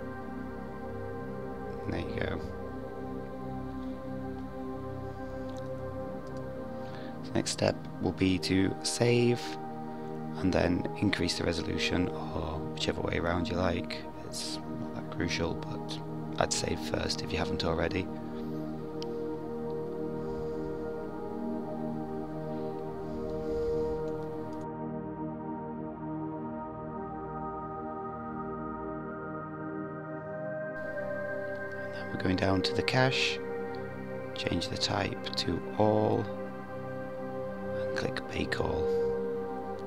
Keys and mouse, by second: 1.5 click, 2.5 click, 5.1-15.5 drag, 16.9-18.8 drag, 34.1-36.8 drag.